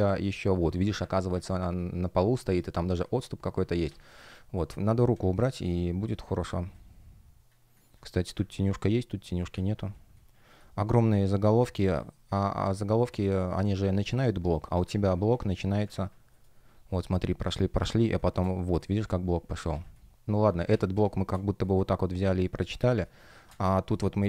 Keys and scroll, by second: 2.3 shift+p, 5.0 space, 8.5 space, 9.5 super+space, 15.2 space, 16.2 alt+shift+l, 17.3 space, 19.6 super+z, 20.6 super+z, 20.8 space, 22.7 space.